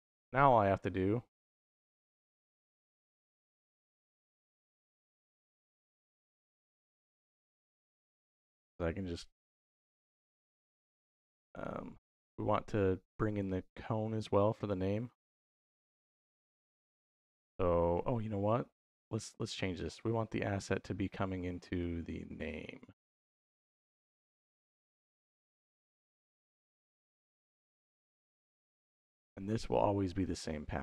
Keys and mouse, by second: 0.6 middle click, 1.4 middle click, 3.8-5.0 drag, 5.7 g, 7.2 click, 8.0 shift+click, 10.1 middle click, 11.4 middle click, 17.1 middle click, 17.8 middle click, 21.6-25.2 drag, 25.8 click, 27.4 click, 28.1-29.5 drag, 30.0-30.8 drag.